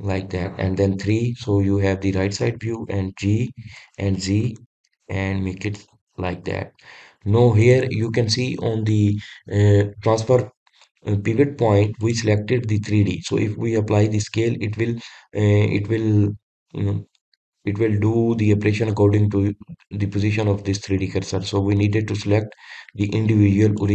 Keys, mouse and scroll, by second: 0.8 scroll up 4, 0.8-2.1 middle drag, 2.1 KP_3, 4.7 g, 7.3-8.6 middle drag, 8.6 drag, 13.0-16.0 drag, 22.3-23.9 drag.